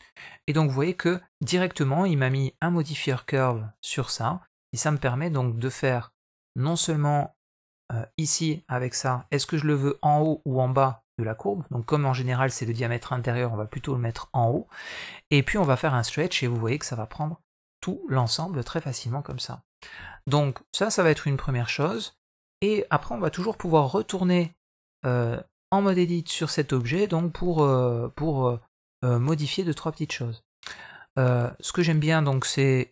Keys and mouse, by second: 0.1 middle click, 4.7 middle click, 9.0 KP_1, 10.6 click, 12.1 click, 16.6-18.3 middle drag, 23.3 Tab, 23.8 middle click, 24.4 middle click, 25.0 middle click, 29.8 Tab.